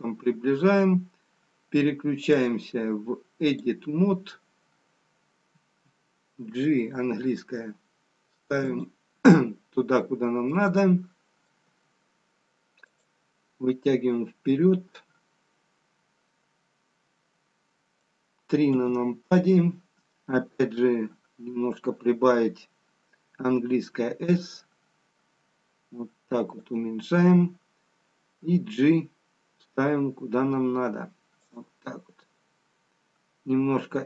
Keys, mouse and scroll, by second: 2.2 click, 6.4 g, 9.2 middle click, 11.1 middle click, 12.5 g, 13.9 middle click, 17.0 middle click, 17.0-19.8 scroll down 3, 19.8 KP_3, 21.1-21.6 scroll up 1, 23.8 s, 28.3 g, 32.5-33.6 scroll up 1, 33.6 s.